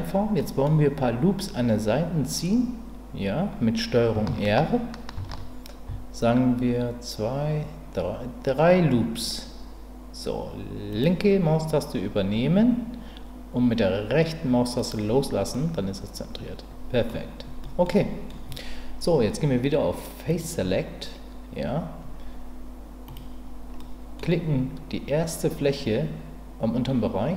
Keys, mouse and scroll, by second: 0.4 middle click, 5.1 ctrl+r, 15.5-17.1 middle drag, 17.7 middle click, 18.0 middle click, 20.3 click, 23.8 middle click.